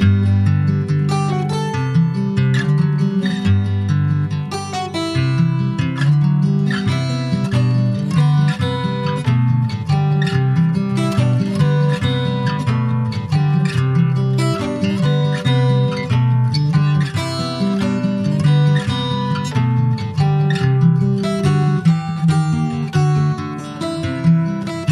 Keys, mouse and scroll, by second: 1.2 middle click, 2.1 ctrl+b, 4.3 Tab, 4.5 click, 4.8-6.0 middle drag, 6.0 click, 6.5 Tab, 6.8 middle click, 7.0-7.3 scroll up 1, 7.3 shift+middle click, 8.0 Tab, 8.4 click, 8.8 middle click, 9.3 Tab, 10.1 click, 10.9 middle click, 11.4 2, 11.8 click, 12.8 alt+shift+click, 13.3-14.3 middle drag, 14.3 g, 17.6 middle click, 18.3 g, 22.1 ctrl+b.